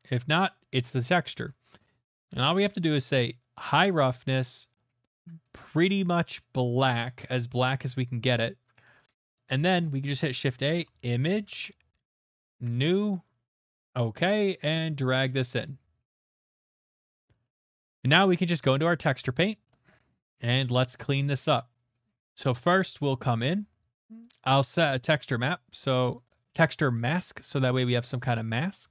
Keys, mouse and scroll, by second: 0.4 click, 1.4 middle click, 2.0 click, 3.8 click, 4.7 click, 7.8 click, 8.3 click, 9.1 middle click, 9.6 a, 9.8 click, 10.7-11.4 typing, 11.5 Return, 12.2 click, 12.6 click, 13.6 click, 15.1 click, 16.6 click, 17.1 middle click, 17.4 middle click, 18.7 click, 19.7 middle click, 20.2 middle click, 20.5 middle click, 24.3 click, 24.5 shift+middle click, 24.8 click, 26.2 right click, 27.6 alt+right click.